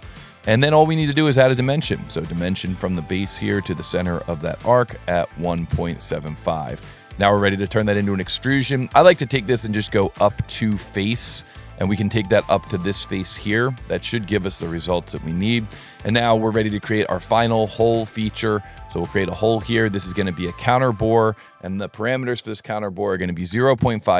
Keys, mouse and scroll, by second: 0.7 click, 2.2 click, 3.4 click, 4.5 click, 6.6 s, 7.4 click, 9.7 click, 11.2 click, 11.9 click, 12.6 click, 14.0 click, 15.3 click, 18.1 click, 20.0 click, 21.2 click, 23.7 Tab, 24.0 Tab.